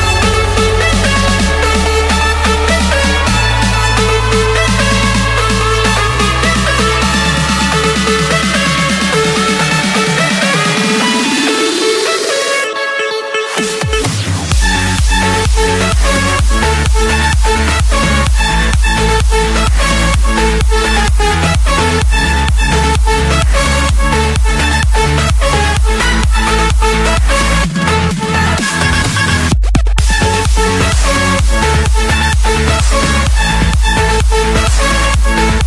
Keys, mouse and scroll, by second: 1.5 click, 1.9 Escape, 2.5 Escape, 4.2 click, 5.4-6.3 scroll, 6.7 click, 7.3 click, 8.2 click, 8.5 Escape, 9.4 click, 10.7 click, 11.2 right click, 12.4 click, 14.2 click, 15.1-16.3 drag, 17.1-17.6 typing, 18.0 Return, 21.3-22.3 drag, 23.7-24.2 typing, 24.8 Return, 25.7 Escape, 26.2 middle click, 28.2-29.2 right drag, 29.6-30.6 drag, 32.6-33.7 drag, 35.3 click.